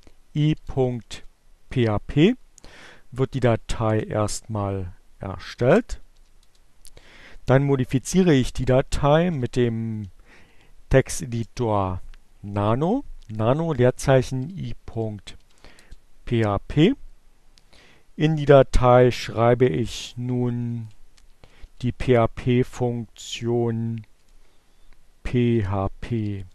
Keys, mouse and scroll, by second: 0.0-1.4 typing, 3.3 Return, 3.9-6.4 typing, 8.3-9.5 typing, 11.1 space, 13.5-15.3 typing, 15.4 Return, 18.7 <, 21.0-22.0 typing, 23.7 p, 24.0 h, 25.2-26.5 typing.